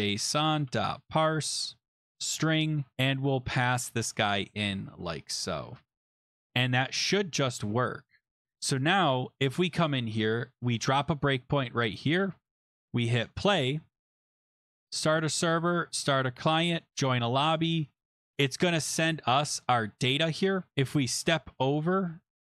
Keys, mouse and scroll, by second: 0.0-1.7 typing, 2.1 Tab, 2.9 Delete, 2.9 scroll, 3.0 Delete, 4.9 click, 5.5 click, 6.0 middle click, 6.1 shift+0, 6.3 ctrl+s, 7.0 click, 10.8 click, 13.3 click, 14.4 click, 15.0 click, 16.0 click, 16.8 click, 17.0 click, 21.0 click.